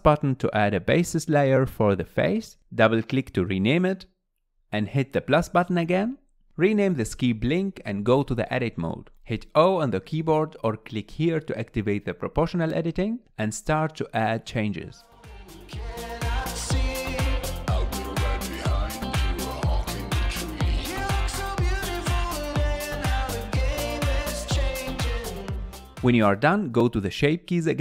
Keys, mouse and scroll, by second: 3.2-5.2 drag, 6.5-8.1 drag, 8.1 Tab, 11.6 click, 13.2 click, 13.4 g, 14.0 scroll up 3, 14.0 middle click, 14.1 scroll down 2, 14.2 click, 15.3 middle click, 15.5-19.6 typing, 15.6 scroll down 5, 15.7 middle click, 16.0 middle click, 16.5 click, 16.7 middle click, 17.0 click, 17.1 alt+z, 18.0 alt+z, 18.7 click, 19.4 alt+z, 19.5 click, 19.5 alt+z, 20.1 middle click, 20.3 scroll down 1, 20.6 click, 20.7 shift+middle click, 20.8 scroll up 2, 20.9 middle click, 21.1 click, 21.2 middle click, 21.4-23.6 typing, 21.9 click, 22.0 middle click, 22.2 middle click, 22.4 click, 22.5 middle click, 23.1 click, 24.1 Tab, 24.2 middle click, 24.2 scroll down 4, 24.3 click, 24.4 scroll up 4, 24.5 middle click, 24.7 middle click, 25.0 g, 25.2-26.0 scroll up 2, 25.3 click, 25.5 g, 25.6 middle click, 26.1 middle click.